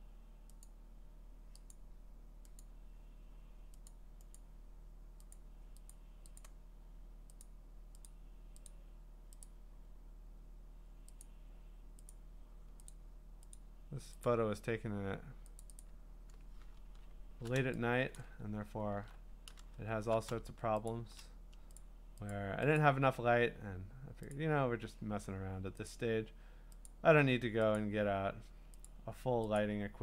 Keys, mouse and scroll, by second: 0.6 click, 1.7 click, 2.6 click, 3.9 click, 5.3 click, 5.4 click, 6.3 click, 7.4 click, 7.4 click, 8.1 click, 8.8 click, 9.6 click, 11.2 click, 12.2 click, 13.0 click, 13.6 click, 14.2 click, 15.6 click, 15.9 click, 16.7-17.1 scroll, 18.2 click, 18.4-19.1 scroll, 19.6 Caps_Lock, 20.9 shift+click, 21.8 click, 22.6 click, 22.7 shift+click, 22.8 click, 24.1 shift+click, 24.3 click, 25.9 click, 26.9 click, 27.8 click, 28.8 click.